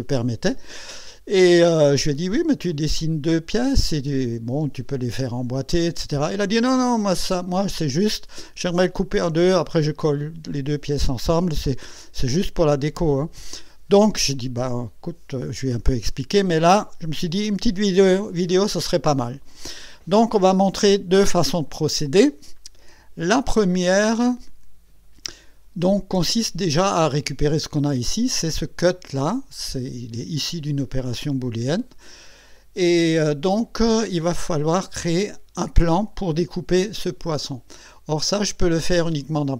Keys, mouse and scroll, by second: 28.6 click.